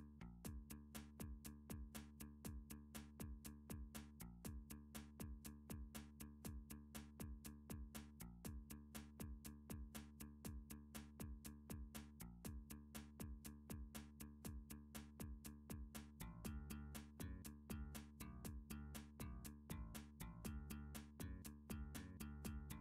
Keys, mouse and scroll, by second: 0.0 click, 1.1 alt+s, 4.7 click, 5.7 click, 6.4 alt+s, 8.7 right click, 9.2 click, 9.7 alt+s, 12.2 click, 12.8 click, 13.1 alt+s, 15.9 click, 16.5 click, 16.8 alt+s, 22.3 click.